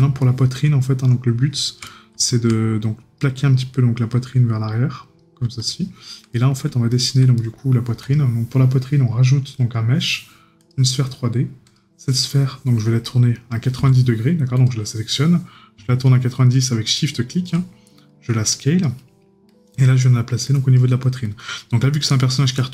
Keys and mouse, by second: 0.2 right click, 1.9 right click, 6.3 right click.